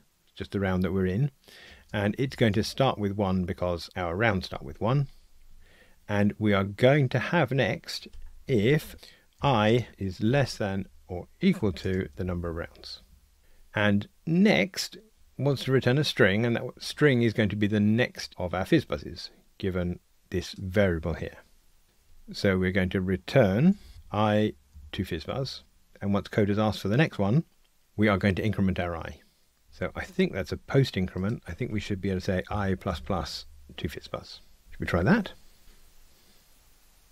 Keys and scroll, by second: 13.0 Tab, 35.6 ctrl+r.